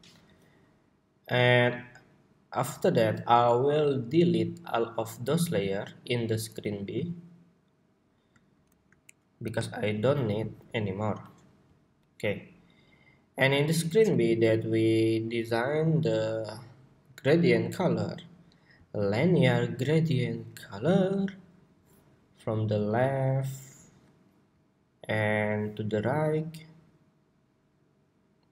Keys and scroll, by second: 0.0 super+y.